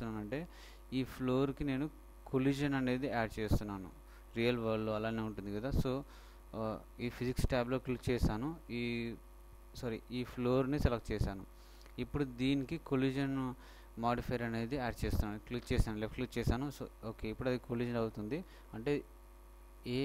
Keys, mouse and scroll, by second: 1.1-2.9 middle drag, 6.6-8.3 drag, 9.3-10.8 right drag, 10.8-14.5 middle drag, 15.3-17.1 drag.